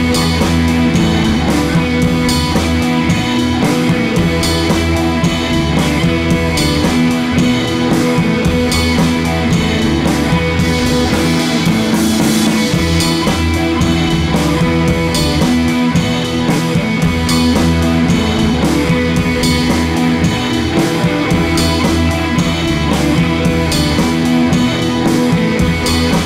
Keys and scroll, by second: 9.8 Down, 9.9 Down, 10.0 Down, 10.1 Down, 10.2 Right, 10.3 Right, 10.4 Right, 11.0 d, 15.5 Left, 15.6 Left, 15.7 Left, 16.0 Right, 16.2 Right, 16.4 Right.